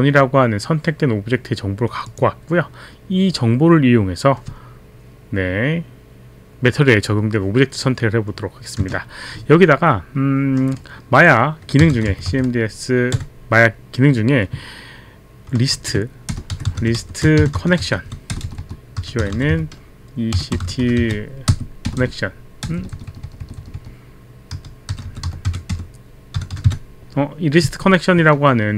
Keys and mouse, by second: 8.8 Return, 11.6-12.8 typing, 15.8-27.2 typing.